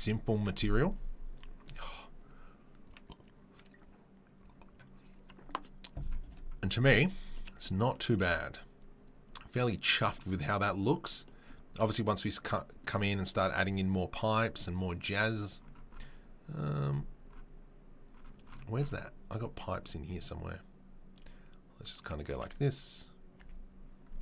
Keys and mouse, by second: 21.2-22.1 right drag, 22.1-24.2 middle drag.